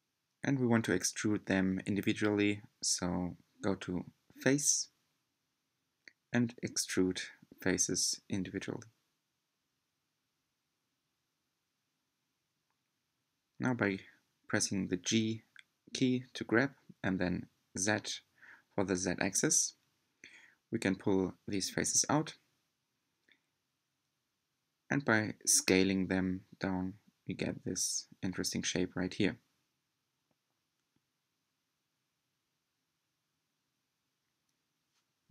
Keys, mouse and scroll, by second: 4.4-8.3 middle drag, 8.3-11.4 drag, 13.9 g, 19.4-21.7 middle drag, 21.7 s, 24.2-27.2 drag, 27.2 s, 33.3 click, 34.4-34.9 scroll up 5, 35.2-35.3 scroll down 1.